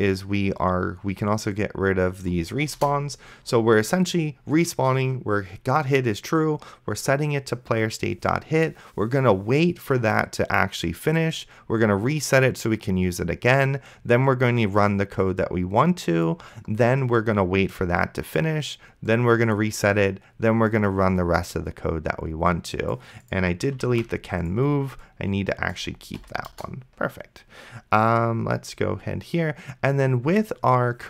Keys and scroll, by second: 3.0 BackSpace, 24.1 ctrl+z, 26.5 BackSpace.